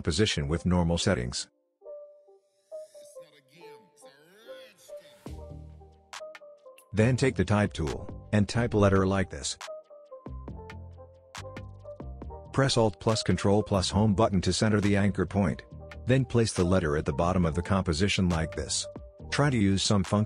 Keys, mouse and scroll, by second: 0.0-2.5 typing, 5.6 click, 9.3 shift+m, 10.8 click, 11.4 alt+scroll down 1, 11.9-12.2 alt+scroll up 1, 13.8 ctrl+alt+Home, 14.8 click, 15.4-16.2 alt+scroll down 2, 16.5-17.1 shift+drag, 17.9 click, 19.0 alt+scroll up 1, 19.8 click.